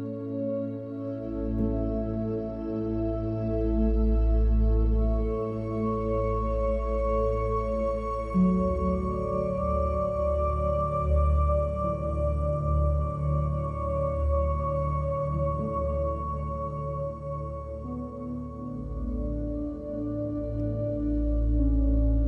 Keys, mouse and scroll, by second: 0.0 click, 0.4 n, 0.6 ctrl+s, 1.0 drag, 1.4 click, 2.1 click, 3.0 click, 4.1 click, 5.0 click, 6.7 click, 8.2 click, 8.5 click, 9.7 ctrl+shift+d, 10.1 click, 12.0 click, 12.5 click, 12.7 click, 13.8 shift+a, 14.6 f, 15.4 click, 18.6 middle drag, 19.1 middle click, 19.9 shift+middle click, 20.5 shift+middle click, 20.9 middle click, 21.5 ctrl+s.